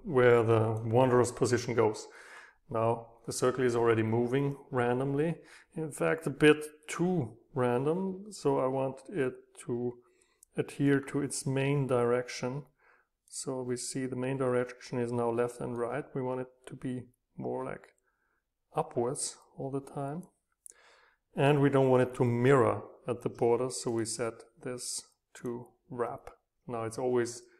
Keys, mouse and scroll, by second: 0.6-2.8 drag, 11.0-12.0 scroll up 3, 12.0-15.3 middle drag, 15.8 middle click, 16.2 middle click, 16.6-17.4 scroll up 2, 17.6 click, 18.4 middle click, 18.4-19.2 scroll up 2, 19.2 click.